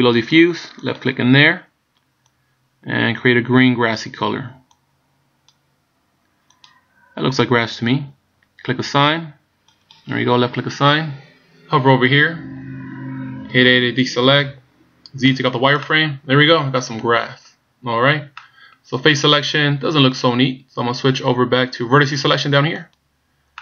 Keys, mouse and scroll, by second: 0.9 click, 9.8 click, 13.6 a, 15.4 z, 16.0 middle click, 18.5 middle click, 23.0 click.